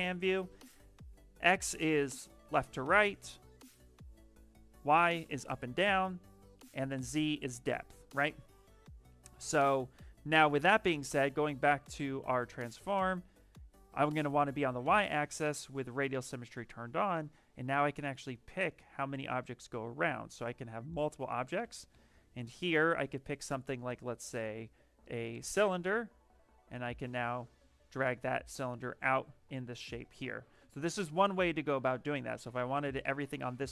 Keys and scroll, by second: 9.2 ,, 10.7 ,, 21.5 b, 22.0 t.